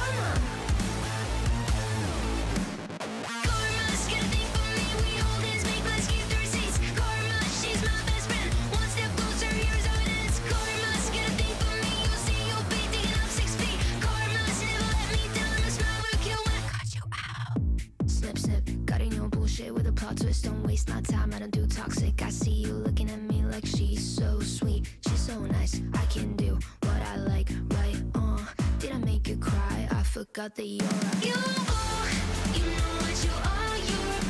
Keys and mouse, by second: 5.2 click, 6.8-8.9 drag, 10.3 click, 12.5-15.2 drag, 15.7 click, 16.8 ctrl+s, 19.0-20.4 drag, 22.2-23.4 drag, 24.3 click, 25.7 click, 26.8-27.7 drag, 28.8 click, 30.1 click, 31.0 click, 32.4 click, 32.8 ctrl+a, 34.0 ctrl+s.